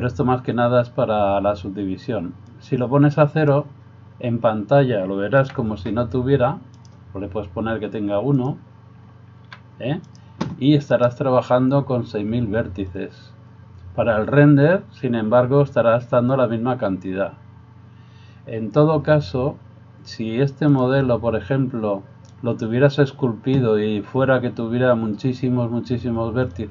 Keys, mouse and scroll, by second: 3.0-20.9 drag, 5.4 g, 9.5 g.